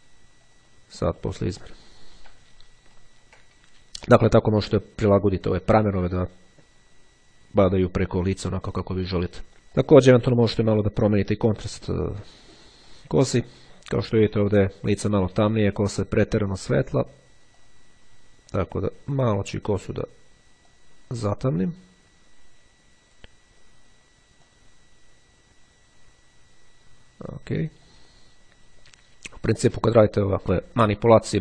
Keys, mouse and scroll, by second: 0.5 click, 2.7-3.2 ctrl+scroll down 2, 9.8 click, 11.9 click, 13.0 click, 17.6-19.9 drag, 20.8-24.2 drag, 24.4-27.4 drag, 27.6 click.